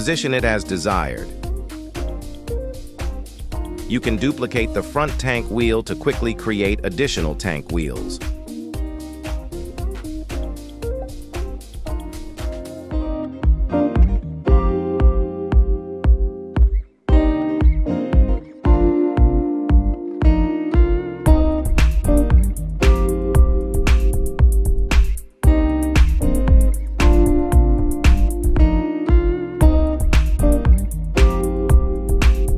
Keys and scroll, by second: 0.3 shift+s, 1.1 Tab, 2.1 shift+s, 3.8 y, 5.9 Tab, 7.0 shift+s, 7.9 Tab, 8.9 shift+s, 9.7 KP_3, 18.8 shift+d, 19.1 Tab, 19.6 shift+s, 20.1 Tab, 20.6 shift+s, 22.7 y, 23.0 z, 23.6 Tab, 24.1 shift+s, 24.5 Tab, 25.0 shift+s, 27.0 y, 27.4 Tab, 28.1 shift+s, 28.3 Tab, 28.8 shift+s, 30.1 ctrl+z, 31.0 shift+s, 31.2 Tab, 31.8 shift+s, 32.2 Tab.